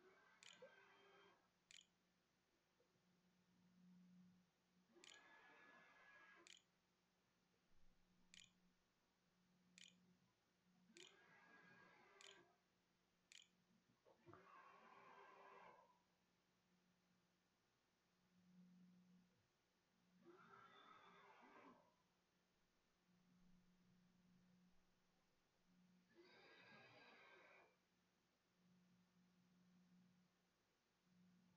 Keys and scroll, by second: 0.4-2.1 typing, 3.3 u, 4.8 v, 5.9 e, 6.7 w, 7.0 q, 7.9 Tab, 8.3-13.6 typing.